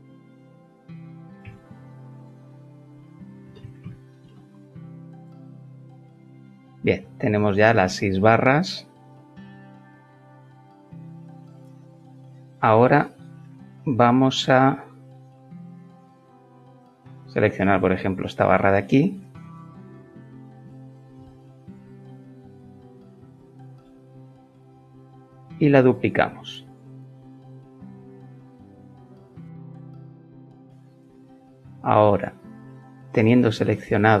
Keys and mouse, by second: 1.2 shift+click, 1.7 x, 3.4 KP_0, 3.7 middle click, 4.2 Return, 7.4 shift+middle click, 10.9 Tab, 13.4-14.1 shift+middle drag, 14.4 shift+middle click, 14.6 shift+middle click, 15.4 Tab, 19.1 click, 19.9 shift+click, 21.7 ctrl+l, 22.8 shift+l, 23.1 shift+middle click, 24.1 shift+middle click, 24.4 shift+middle click, 25.4 shift+d, 26.2 d, 26.8 middle click.